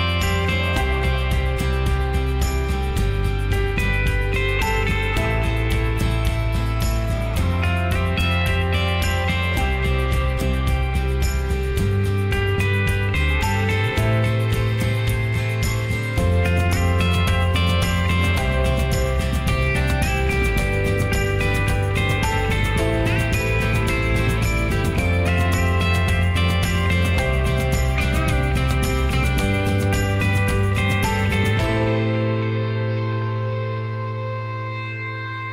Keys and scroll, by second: 15.4 Up, 15.7 Up, 15.7-17.4 typing, 17.0 Up, 17.5 Return.